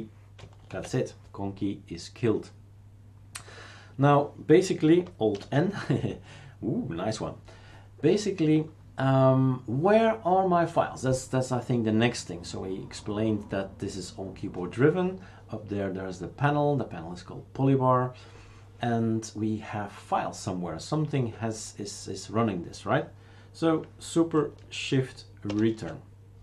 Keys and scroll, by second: 0.7 shift+super+q, 5.3 alt+n, 25.4 shift+super+Return.